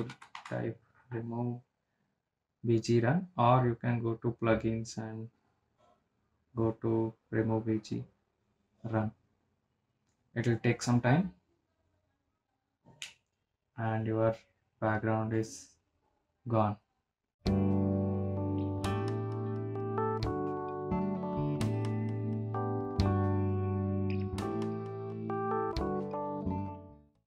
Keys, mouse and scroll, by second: 0.9-2.7 typing, 4.4 typing, 4.8 click, 10.2 click, 16.1 click.